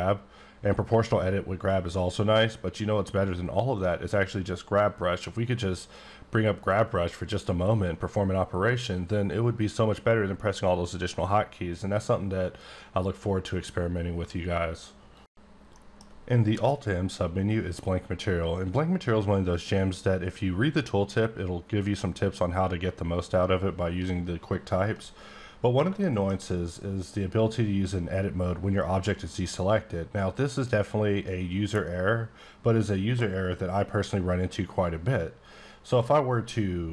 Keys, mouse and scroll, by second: 16.5 middle click, 16.7 m, 25.3 scroll up 2, 26.0 shift+middle click, 26.5 scroll up 2.